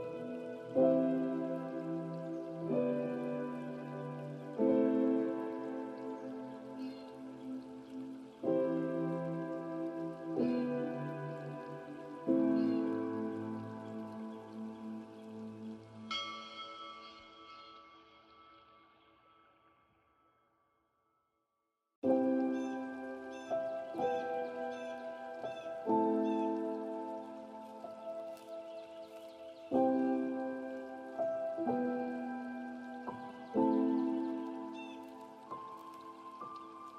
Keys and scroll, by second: 8.1 ctrl+space, 18.3 ctrl+g, 22.5 ctrl+space.